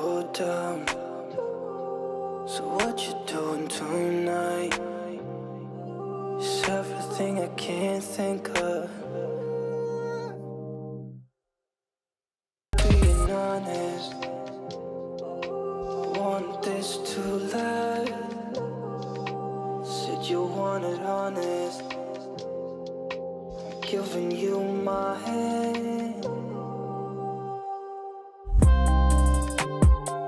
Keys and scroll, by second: 12.7 ctrl+space, 28.7 ctrl+space.